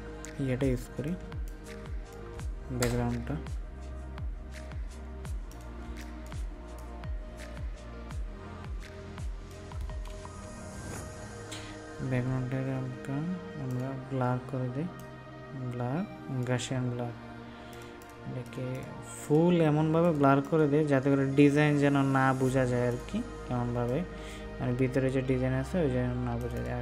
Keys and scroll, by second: 23.6 ctrl+space.